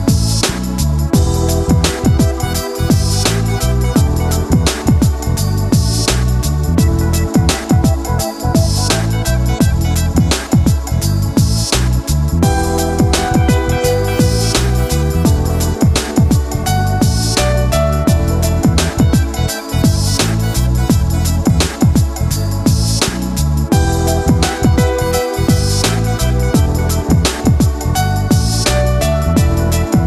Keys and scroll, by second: 7.1 ctrl+z.